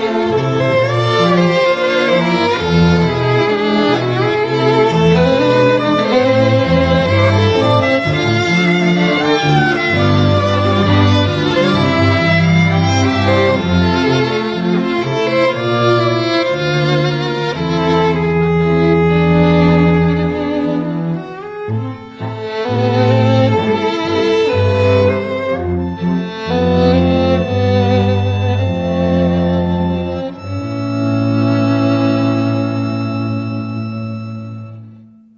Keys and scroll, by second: 8.9 x, 13.8 [.